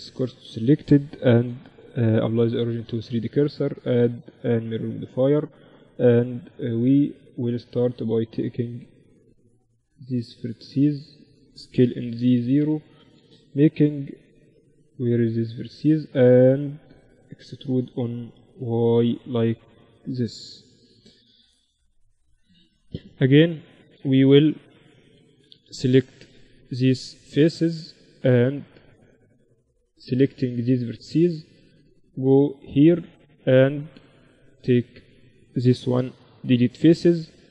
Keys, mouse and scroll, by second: 0.7 ctrl+alt+shift+c, 3.1-5.0 drag, 5.0 Tab, 5.9 middle click, 7.9-10.9 drag, 9.5-10.7 right drag, 11.2-12.5 right drag, 11.2 shift+s, 12.9-14.6 drag, 13.1-14.6 right drag, 13.9 z, 14.9-16.3 right drag, 15.2 z, 16.3 KP_7, 17.7 e, 19.9 z, 20.3 middle click, 21.7-23.5 drag, 22.7 Tab, 23.5 KP_1, 24.0 z, 24.7-25.8 middle drag, 24.9 Tab, 25.8-27.1 right drag, 27.2-28.4 middle drag, 28.4-32.9 drag, 29.1-31.5 right drag, 33.1-35.1 drag, 33.5-36.1 right drag, 33.7 z, 35.1 x, 37.2-37.5 drag.